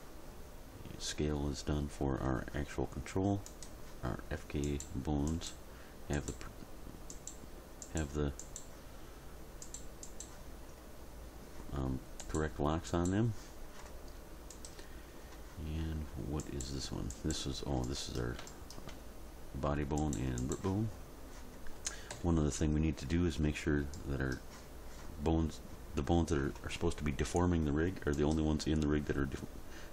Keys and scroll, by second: 22.1 End.